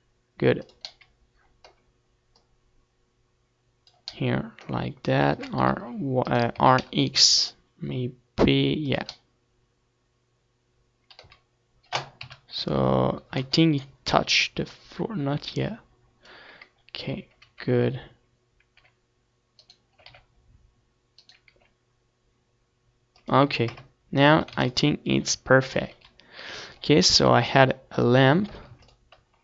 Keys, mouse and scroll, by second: 0.3 middle click, 0.8-2.1 drag, 2.1-4.4 middle drag, 3.4 r, 4.4-6.9 right drag, 4.6 r, 7.0-8.5 drag, 9.2 z, 10.2 KP_3, 13.4-15.6 drag, 15.6 z, 16.9 r, 17.8-21.0 right drag, 18.0 r, 19.6 r, 21.3-22.9 drag, 21.6 KP_0, 22.3 a, 22.5 ctrl+s, 25.0 KP_7, 26.6 ctrl+s, 27.3 click, 28.0 Tab, 28.5 Tab, 28.9 shift+a.